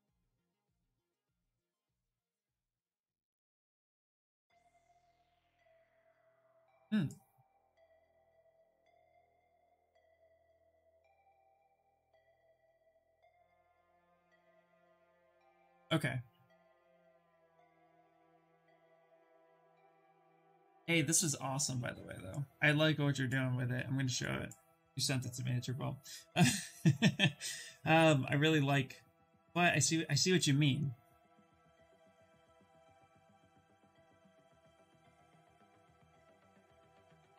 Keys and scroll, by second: 32.9-34.0 typing, 36.2-37.3 typing.